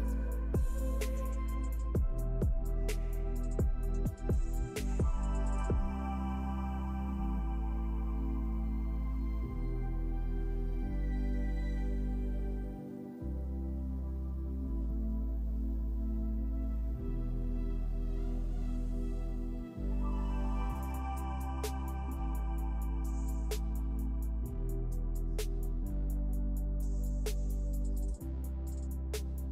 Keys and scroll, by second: 23.2 KP_4, 23.4 KP_0.